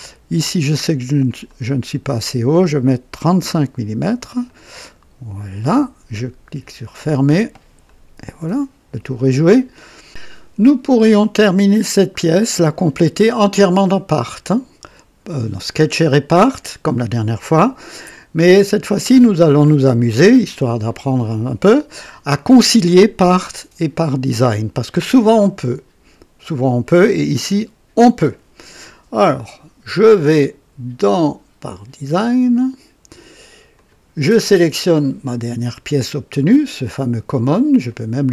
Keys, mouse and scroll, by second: 1.2 click, 3.1 typing, 4.4 click, 6.6 click, 6.9-7.3 typing, 7.8-10.0 drag, 9.2 typing, 31.0 click, 32.4 click, 33.7 click, 34.7 click, 37.8 click.